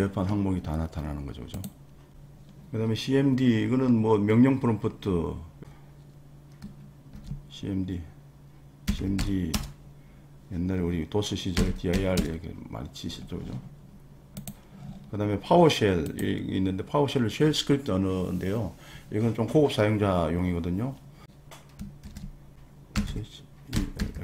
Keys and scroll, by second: 7.1 super+r, 8.8 c, 9.2 d, 9.5 Return, 11.3-12.4 typing, 22.0 super+r, 22.7-24.2 typing.